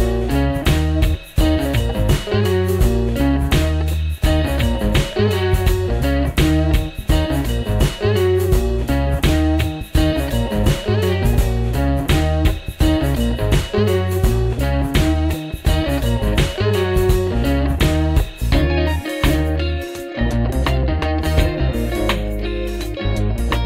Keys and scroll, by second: 5.3 F4, 12.9 F4, 16.6 alt+q, 17.2 alt+q, 17.6 F4, 20.9 alt+q.